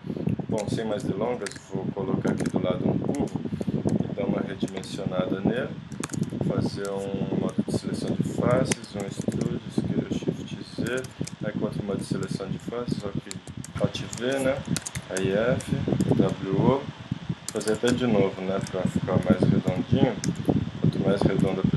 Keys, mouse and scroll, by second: 0.4 click, 1.5 KP_1, 2.4 shift+a, 3.0 click, 3.7 click, 4.0 s, 4.8 s, 7.8 ctrl+Tab, 8.5 e, 9.1 s, 10.9 ctrl+Tab, 11.4 click, 12.4 z, 12.9 alt+v, 13.7 alt+v, 13.7 z, 13.9 super+right click, 14.1 super+click, 14.9 ctrl+Tab, 15.3 click, 16.0 w, 17.5 ctrl+Tab, 19.4 KP_6, 19.7 KP_7, 20.3 z, 21.4 KP_5.